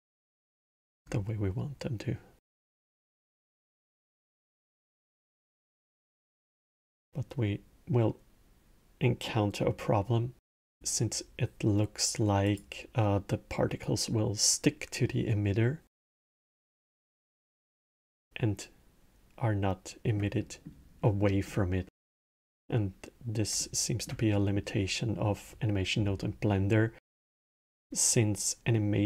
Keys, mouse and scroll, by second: 0.4-0.9 middle drag, 0.9 scroll, 2.6-5.4 middle drag, 5.4 scroll, 6.2 space, 9.1-10.4 middle drag, 10.4 space, 12.2 click, 16.4-19.4 alt+middle drag, 20.2-21.2 middle drag, 21.2 scroll, 21.6-27.2 middle drag, 28.5-29.0 middle drag.